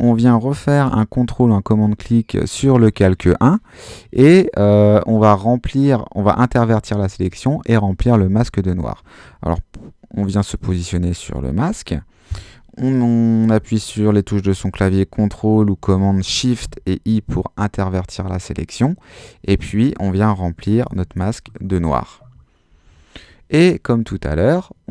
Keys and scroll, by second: 16.7 shift+super+i, 20.9 shift+BackSpace, 21.2 shift+Return, 22.1 Return, 22.7 super+d.